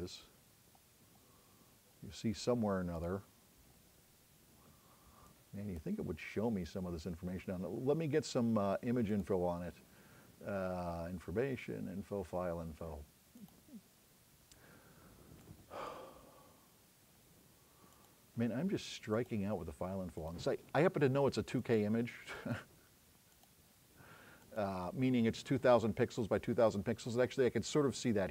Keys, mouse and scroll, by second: 0.3-1.5 scroll down 3, 3.0 click, 3.8 middle click, 4.3 scroll down 2, 4.8 scroll up 2, 14.3-15.5 drag.